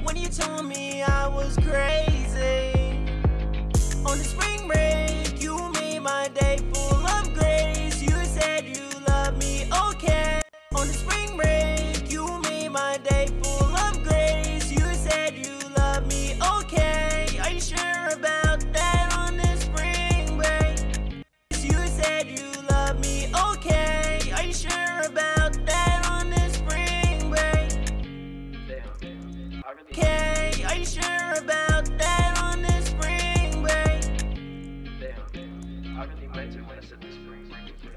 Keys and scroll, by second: 35.3 super+s, 35.6 e.